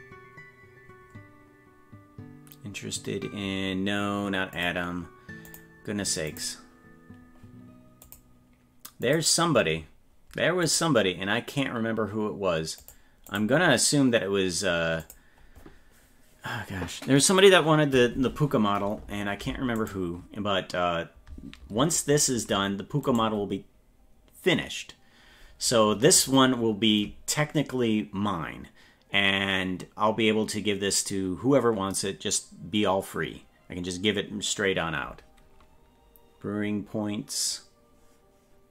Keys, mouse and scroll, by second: 19.9 right click, 22.0-22.6 scroll up 5, 23.1 right click.